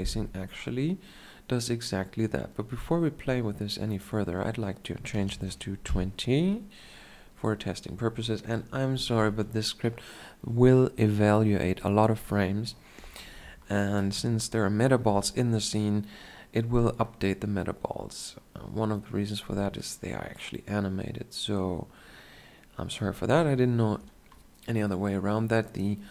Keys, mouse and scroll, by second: 18.9-21.1 drag.